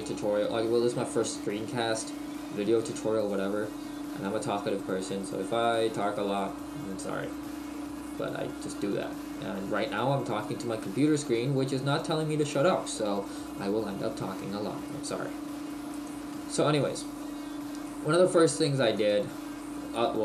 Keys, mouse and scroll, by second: 17.2-17.6 scroll up 2.